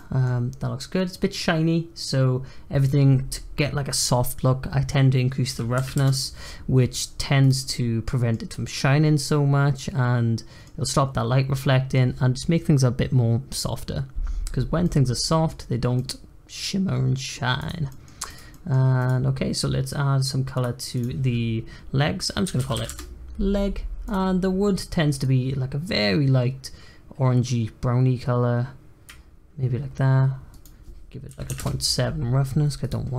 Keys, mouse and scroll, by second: 2.8-5.8 drag, 7.4 click, 7.6-14.6 middle drag, 14.8 middle click, 15.6-15.9 scroll up 1, 15.9-17.6 middle drag, 17.6 click, 17.8 middle click, 18.3 click, 18.5 middle click, 18.9 click, 20.5-23.9 drag, 24.0 click, 30.5-32.8 drag, 33.1 scroll down 2.